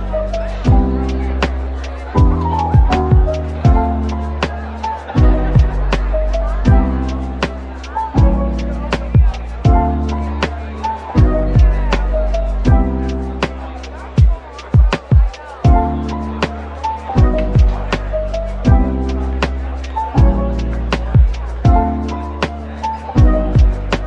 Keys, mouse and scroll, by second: 0.7 typing, 1.8 ctrl+b, 3.5 Tab, 4.1-4.4 scroll up 1, 4.4 right click, 5.4 middle click, 6.3-7.9 typing, 8.7 middle click, 9.2 typing, 10.1-11.2 scroll up 1, 10.9-13.5 typing, 12.0 Tab, 14.6 typing, 16.4 typing, 17.5-19.2 typing, 19.8 Tab, 20.3 middle click, 21.7 typing, 22.7 middle click, 23.1 typing.